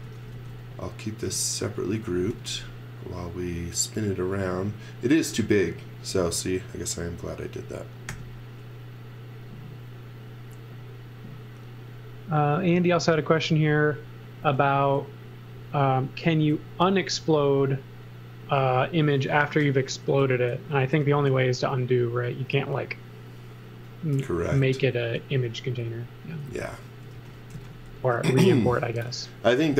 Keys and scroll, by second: 0.0-0.8 typing, 1.9 x, 2.3 v, 8.1 r, 19.9 1, 20.5 x, 20.8 Return, 22.2 x, 22.5 v, 25.1-28.3 typing, 29.5 m.